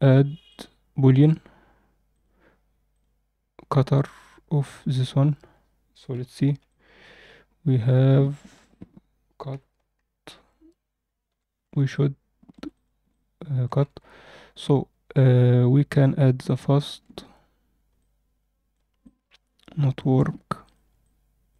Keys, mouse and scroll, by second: 0.4-1.2 drag, 2.0 click, 4.8 click, 6.0 h, 6.6-8.5 middle drag, 8.6 click, 9.4 KP_7, 9.9-10.3 scroll up 2, 10.3 z, 11.0 scroll down 1, 11.2 z, 11.6 alt+a, 11.8-12.5 alt+middle drag, 12.6 click, 13.0-13.5 middle drag, 15.5 Tab, 16.4 click, 17.2 Tab, 17.9-18.6 middle drag, 19.0-19.9 alt+middle drag.